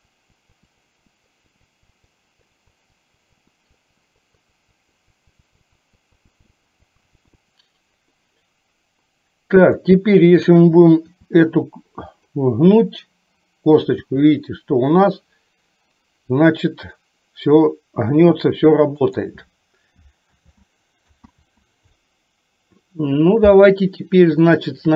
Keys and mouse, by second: 0.3 click, 1.2 click, 1.6 click, 2.3 click, 2.5 click, 2.9 click, 3.2 click, 3.5 click, 3.9 click, 4.2 click, 4.5 click, 4.9 click, 5.1 click, 5.5 click, 5.9 click, 6.3 click, 6.8 click, 7.1 click, 11.3 r, 14.1 r, 20.4 ctrl+z, 21.4 ctrl+z, 24.5 shift+middle click.